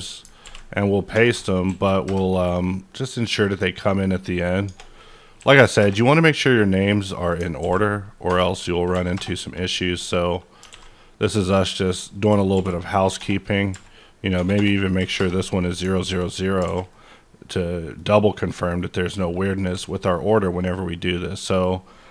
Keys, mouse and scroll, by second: 0.0 double click, 0.4 v, 1.6 KP_4, 2.0 KP_Enter, 3.1 click, 3.4 double click, 3.9 click, 5.4 KP_4, 5.8 KP_Enter, 7.0 click, 7.1 double click, 7.6 ctrl+v, 8.9 KP_5, 9.1 KP_Enter, 10.7 alt+a, 11.9 click, 12.1 double click, 12.4 ctrl+v, 13.7 KP_0, 13.7 KP_2, 15.0 KP_0, 15.2 KP_Enter, 16.1 ctrl+s, 16.4 scroll up 2, 16.6 a, 16.9-19.7 middle drag, 19.3 click, 19.7 g, 20.1 right click.